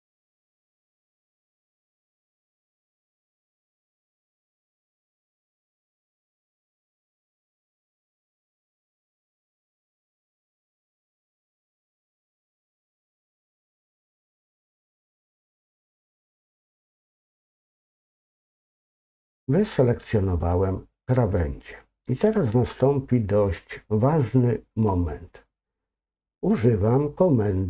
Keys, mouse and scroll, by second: 1.9 scroll up 1, 2.2 ctrl+click, 2.7-3.4 ctrl+scroll down 3, 3.4 middle click, 4.2 scroll up 1, 7.7 shift+click, 9.9 ctrl+click, 11.2-17.4 middle drag, 17.7 middle click, 18.4 middle click, 19.4 scroll up 2, 19.5-21.4 middle drag.